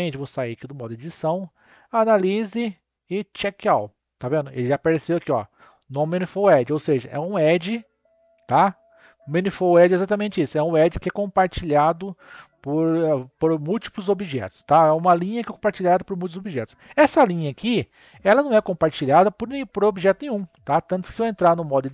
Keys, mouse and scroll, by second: 0.0 Tab, 1.4-6.4 drag, 13.3-16.3 middle drag.